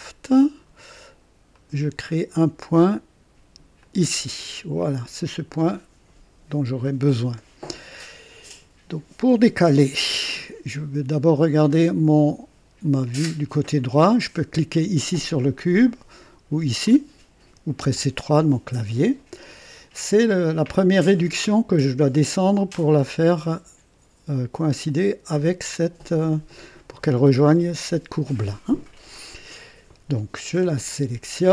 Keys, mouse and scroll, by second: 1.5 click, 3.8 click, 16.8 click, 17.9 KP_3, 30.8 click.